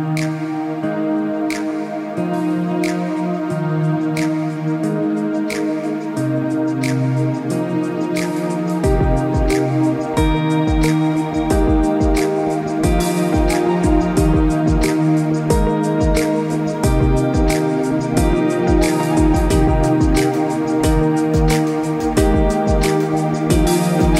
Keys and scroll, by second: 0.7 Escape, 1.0 Escape, 23.4 Escape, 23.8 Escape.